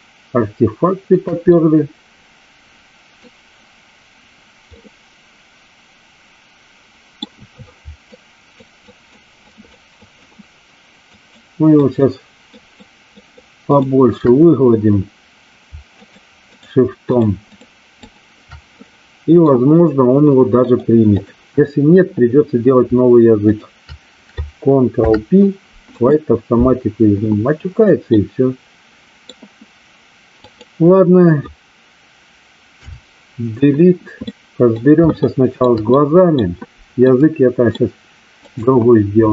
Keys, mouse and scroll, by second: 1.4-3.3 middle drag, 4.7-7.1 middle drag, 8.1 shift+click, 8.9 shift+click, 9.4 shift+click, 10.0 shift+click, 11.0 shift+click, 11.7 shift+click, 12.5 shift+click, 13.1 shift+click, 15.9 shift+click, 16.5 shift+click, 17.0 shift+click, 17.5 shift+click, 18.0 shift+click, 18.7 middle click, 20.6 click, 24.9 ctrl+p, 28.1-29.3 middle drag, 30.5 click, 34.1-34.7 middle drag, 35.1-35.7 shift+middle drag, 35.9-36.4 middle drag, 37.0-37.6 middle drag, 38.4 click.